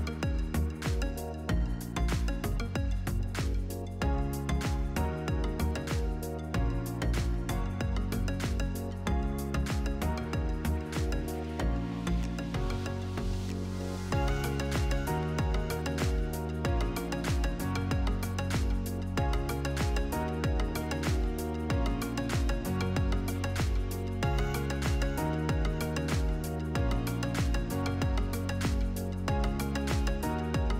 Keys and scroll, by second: 3.9 8, 5.1 Return, 7.2-8.7 typing, 9.8 o, 10.1 i, 22.9 b, 23.2 e, 28.6 ctrl+v, 30.3 Delete.